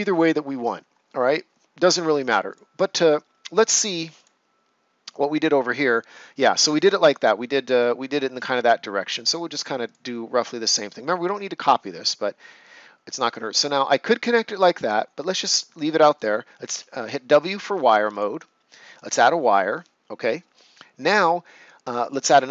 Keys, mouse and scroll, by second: 2.4 click, 9.8 click, 16.6 w, 18.0 click, 22.0 click.